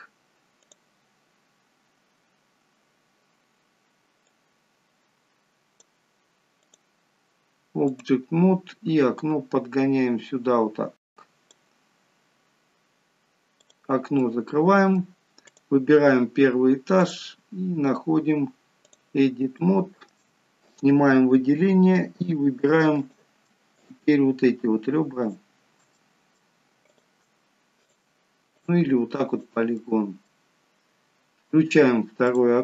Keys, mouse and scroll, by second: 4.3 click, 6.7 click, 13.5 click, 14.1 middle click, 15.4 click, 16.9 click, 19.4 shift+middle click, 20.5 click, 21.4-22.5 scroll up 1, 22.8 click, 23.6 shift+click, 25.1 click, 25.8 middle click, 25.8-26.4 scroll up 1, 26.8 shift+click, 27.7 click, 28.4 click, 29.6 middle click, 32.1 click.